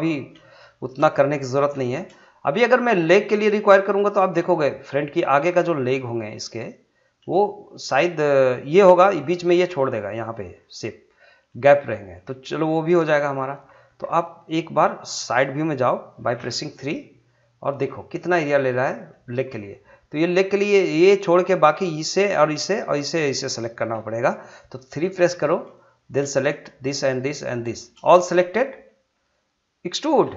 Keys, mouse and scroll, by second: 0.6 shift+middle click, 1.6 scroll up 2, 1.8 shift+middle click, 3.2 click, 3.6-5.4 middle drag, 5.4 click, 5.8-8.9 middle drag, 10.3 click, 10.6-13.1 middle drag, 13.1 scroll down 1, 13.3 middle click, 17.4 scroll up 1, 18.2 shift+middle click, 25.0 shift+middle click, 25.7 click, 26.3 shift+click, 28.2-30.0 scroll down 2.